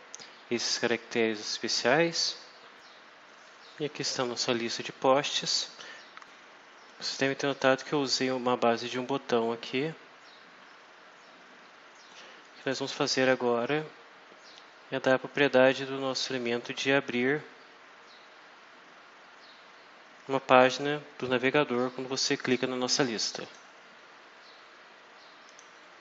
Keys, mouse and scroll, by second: 6.2 click, 7.7 click, 12.3 click, 23.3 click, 25.4 click.